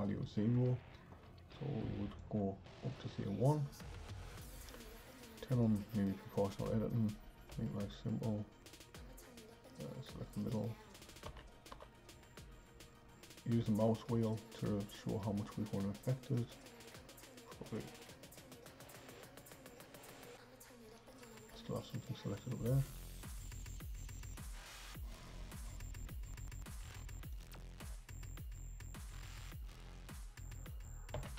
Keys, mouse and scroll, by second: 0.7 Tab, 2.2-5.2 drag, 5.6 click, 7.5 c, 11.3 g, 23.2 click, 23.6 click, 24.7 click, 27.3 click, 27.8 c, 31.1 g.